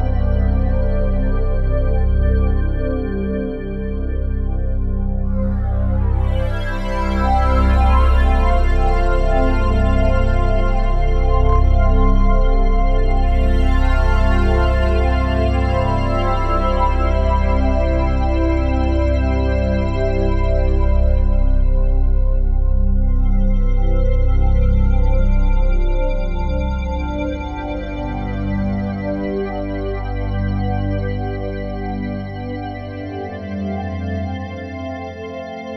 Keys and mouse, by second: 1.8-3.4 ctrl+alt+drag, 4.4 alt+shift+click, 8.2-10.9 drag, 11.3-12.5 drag, 14.0 f, 14.8 click, 16.1-17.6 drag, 19.1 ctrl+z, 21.5-23.8 alt+drag, 24.3 click, 24.7 click, 25.3 click, 26.3-30.2 drag, 30.2 ctrl+z, 31.6 f, 32.6-35.7 drag.